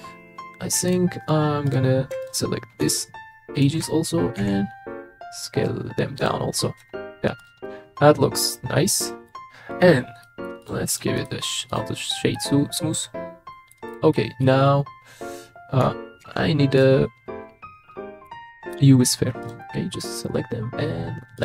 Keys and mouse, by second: 0.9 click, 1.7 click, 3.6 alt+shift+click, 4.4 s, 6.2 click, 6.8 Tab, 7.6-9.3 middle drag, 10.2 middle drag, 10.6 click, 11.3 click, 12.4-13.7 middle drag, 14.1 middle click, 16.2 shift+a.